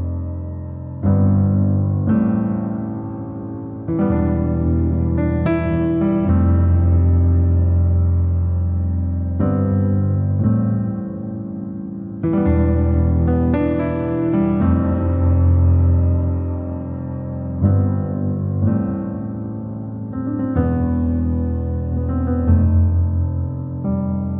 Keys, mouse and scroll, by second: 0.4-0.8 scroll down 3, 0.8-2.6 middle drag, 2.6 Tab, 3.5-4.5 middle drag, 4.5 /, 5.0 click, 5.5 /, 6.2 middle click, 6.8-7.2 scroll up 2, 7.2 middle click, 11.3 click, 12.7 Tab, 13.4-13.8 scroll down 2, 13.8 middle click, 14.3 Tab, 15.5 click, 15.8 /, 16.5-16.9 scroll up 3, 16.9-19.1 middle drag, 19.1 click, 19.7 middle click, 20.6 click, 20.9 Tab, 21.5 middle click, 21.9 Tab, 22.5-24.1 middle drag, 24.1 ..